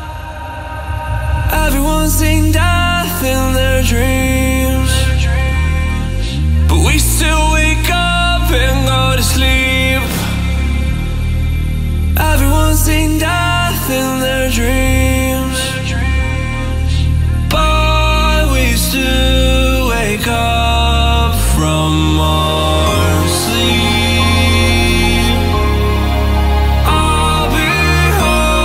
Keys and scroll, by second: 3.4 alt+a, 14.2 alt+a, 23.2 ctrl+a, 25.1 alt+a.